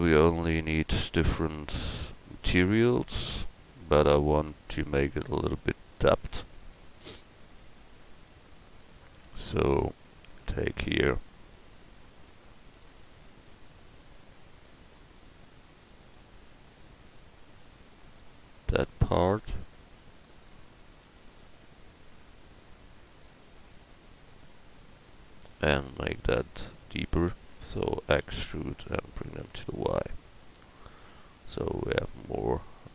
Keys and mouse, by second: 5.9-26.0 drag, 7.4 right click, 28.1 e.